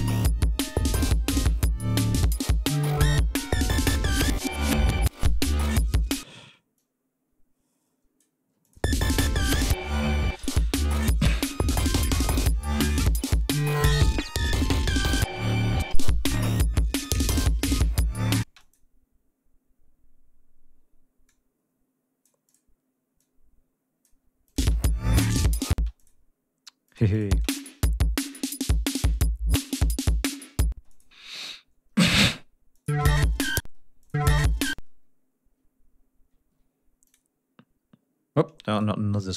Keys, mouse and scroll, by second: 0.2 ctrl+scroll down 2, 0.6 ctrl+scroll up 2, 2.1 click, 2.8 click, 3.7 click, 4.5 click, 5.8 ctrl+scroll up 2, 6.2 ctrl+space, 6.7-8.3 ctrl+drag, 8.6 click, 8.7 space, 10.1 ctrl+scroll down 2, 10.5 ctrl+scroll up 2, 11.6 ctrl+scroll down 2, 12.3 ctrl+scroll down 2, 12.6 ctrl+scroll up 2, 13.2 ctrl+scroll up 2, 14.9 ctrl+scroll down 2, 15.2 ctrl+scroll up 2, 16.1 ctrl+scroll down 2, 16.4 ctrl+scroll up 2, 18.4 space, 18.5 click, 21.2-22.4 drag, 22.4 click, 23.1 click, 24.4 click, 24.5 space, 25.7 space, 25.9 click, 26.8 click, 27.3 space, 28.6 ctrl+scroll down 2, 28.7 ctrl+scroll up 2, 30.0 ctrl+scroll down 2, 30.7 ctrl+space, 30.8 ctrl+click, 31.2 ctrl+scroll down 2, 31.4-32.1 ctrl+scroll up 4, 32.7 ctrl+click, 32.9 space, 33.0 ctrl+scroll up 2, 33.6 ctrl+space, 35.6 ctrl+scroll down 2, 36.0 ctrl+scroll up 2, 36.4 ctrl+d, 37.0 click, 38.7 shift+right click, 39.1 shift+right click.